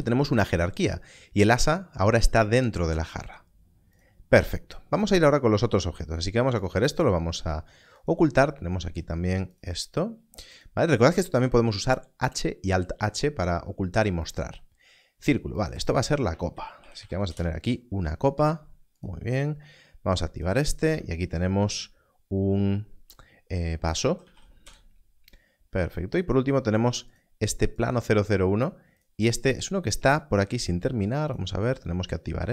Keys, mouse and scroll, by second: 7.9 click, 15.5 click, 16.5 shift+c, 17.0 p, 17.3 Return, 18.9 click, 23.8 shift+v, 24.2 s, 24.6 Return, 27.1 click, 31.2 click, 32.1 Left.